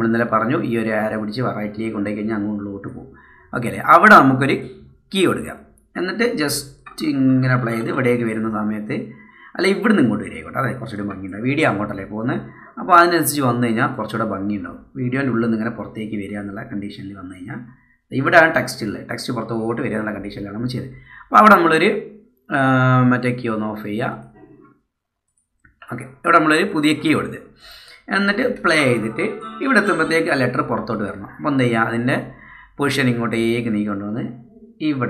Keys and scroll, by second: 28.8 space, 30.1 space.